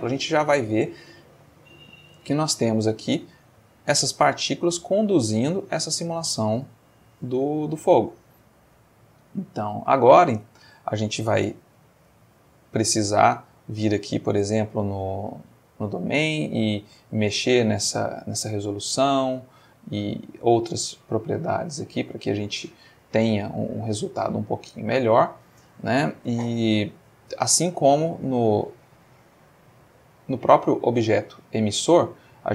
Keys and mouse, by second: 0.9-8.3 drag, 9.2 click, 9.8 click, 10.7 shift+middle click, 11.8-13.4 drag, 14.2 click, 15.7 click, 18.5 middle click, 19.6 middle click, 22.3 middle click, 24.2-25.4 middle drag, 25.5 middle click, 28.7 click, 29.3 click, 30.9 click.